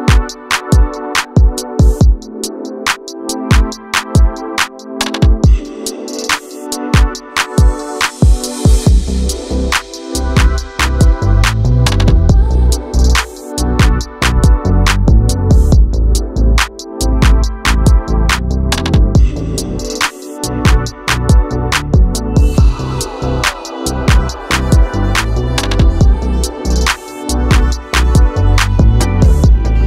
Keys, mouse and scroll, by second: 2.2-4.0 drag, 7.0-8.2 drag, 10.6-16.9 drag, 18.7-20.0 drag, 20.8-23.1 right drag, 23.1 click, 24.0-27.2 right drag, 29.7-29.8 scroll up 1.